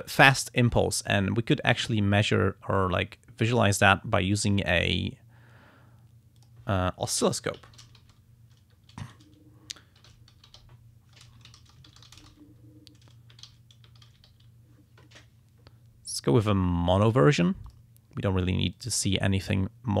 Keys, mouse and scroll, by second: 3.5 click, 4.4 right click, 6.4 click, 7.5-8.6 typing, 8.9 ctrl+a, 9.7-11.1 typing, 11.2 ctrl+a, 11.6 ctrl+shift+s, 11.7 ctrl+shift+i, 11.9 ctrl+shift+m, 12.0 ctrl+shift+p, 12.1 ctrl+shift+e, 12.2 ctrl+shift+space, 13.7-14.8 typing, 16.9 click, 17.7 click, 18.7 click.